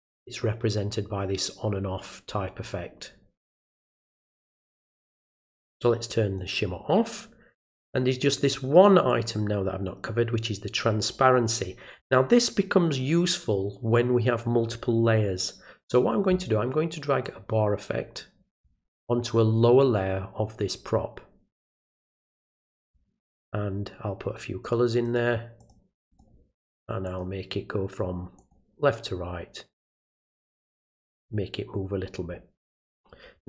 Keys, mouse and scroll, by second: 3.1 ctrl+middle click, 3.5-4.6 ctrl+middle drag, 6.4 click, 17.2-18.6 drag, 21.6 click, 22.8 click, 24.6 click, 25.0 click, 25.6 click, 26.1 click, 27.0 click, 28.4 click, 30.1 click.